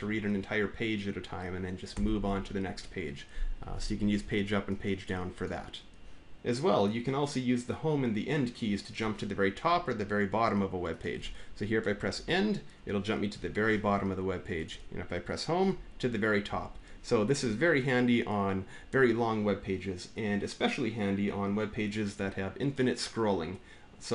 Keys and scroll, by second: 1.7 Page_Down, 12.0 End, 15.4 Home.